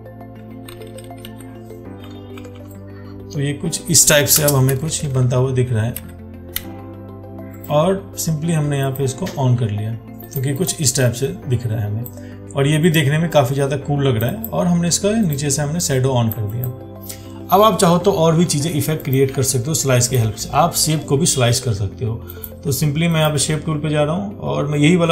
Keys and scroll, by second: 2.6 ctrl+t.